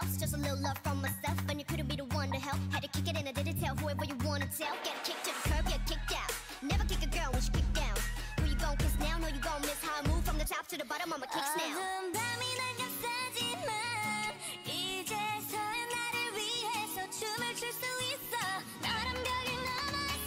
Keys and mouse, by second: 0.4-4.9 typing, 1.8 click, 6.9 r, 7.5 r, 8.7 g, 11.9 g, 13.8 a, 14.5 l, 14.9 r, 16.1 g, 17.9 g.